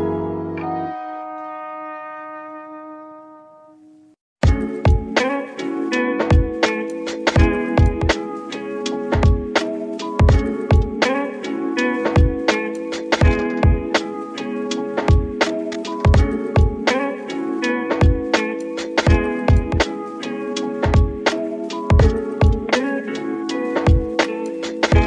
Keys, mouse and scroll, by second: 0.1 click, 0.3 i, 0.3 i, 1.2 click, 1.5 Tab, 2.1-3.9 middle drag, 3.9-8.1 drag, 8.1 scroll down 2, 9.0-9.4 scroll down 2, 9.3 middle click, 9.8 a, 10.4 middle click, 10.9 shift+d, 11.3 z, 12.1 click, 12.3 s, 14.4 click, 14.6 middle click, 15.4 s, 16.1 click, 16.3 middle click, 16.8-17.1 scroll up 3, 17.1 middle click, 17.5 g, 17.7 z, 18.4 click, 18.7-19.1 scroll down 2, 19.1 shift+middle click, 19.6 click, 19.9 middle click, 20.5 shift+a, 21.4 click, 22.0 g, 22.2 z, 22.8 click, 23.0 s, 24.3 click, 24.6 scroll up 3, 24.9 s.